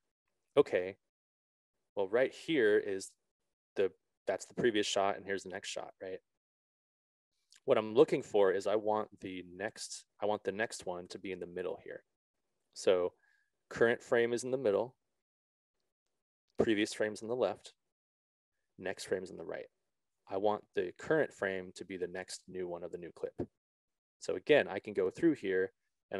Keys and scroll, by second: 2.7 Left, 3.7 Right, 4.3 Left, 5.7 Right, 6.7 Left, 8.1 Right.